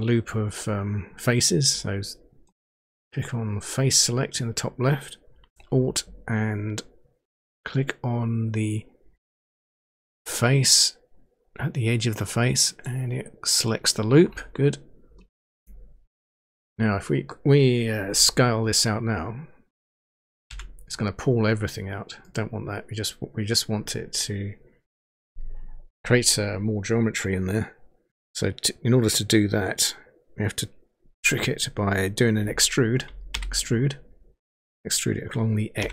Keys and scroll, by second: 20.4 s, 33.4 e, 35.8 x.